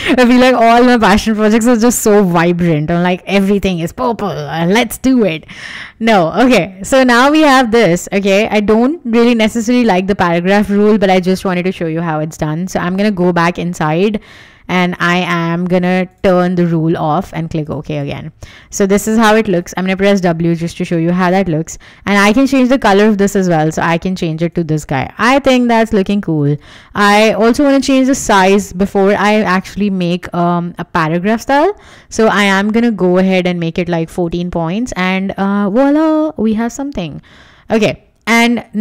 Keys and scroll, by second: 9.9 Escape, 12.5 alt+super+j, 19.6 w, 24.0 Escape, 34.8 Escape, 35.8 w.